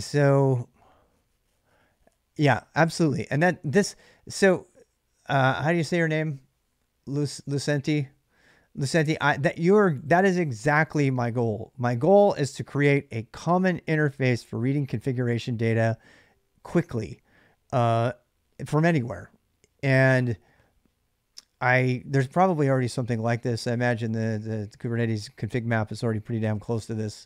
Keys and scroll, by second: 3.0 ctrl+[, 3.0 j, 3.2 j, 21.1 j, 21.3 j, 21.7 j, 22.0 j, 25.7 k, 25.9 k, 26.3 k, 26.5 k.